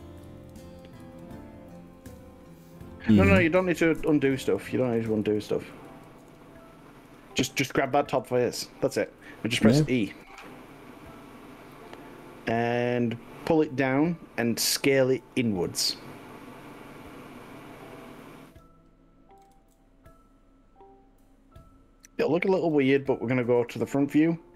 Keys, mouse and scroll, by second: 0.3 ctrl+z, 0.7 ctrl+z, 1.0 ctrl+z, 4.1 ctrl+z, 4.4 ctrl+z, 5.1 ctrl+shift+z, 5.3 ctrl+shift+z, 5.7 ctrl+shift+z, 5.9 ctrl+shift+z, 7.1 click, 7.9 click, 10.1 e, 15.2 click, 15.7 g, 18.5 click, 19.6 s, 22.7 click, 23.0-24.5 middle drag.